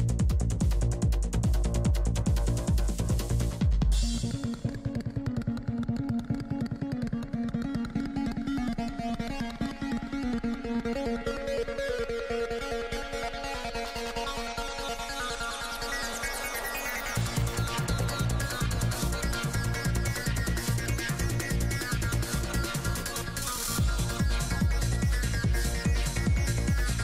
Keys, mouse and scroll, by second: 0.9 shift+c, 1.0 shift+f, 1.4-4.1 drag, 1.6 f, 4.1 ctrl+z, 5.5 ctrl+z, 5.8-7.4 drag, 7.0-9.0 middle drag, 8.2 f, 8.3 click, 9.7 click, 9.7-11.4 middle drag, 10.7 click, 12.3 click, 12.3 middle click, 13.0 f, 13.4 click, 14.7 i, 14.9 f, 15.2 f, 15.6-18.7 drag, 17.5 shift+f, 19.1-20.5 drag, 19.1-20.3 right drag, 20.8 shift+c, 20.9 shift+f, 21.5 f, 21.8-23.0 middle drag, 22.1 f, 22.6 click, 23.4 shift+f, 23.8 click, 24.3 middle click, 24.9-27.0 drag.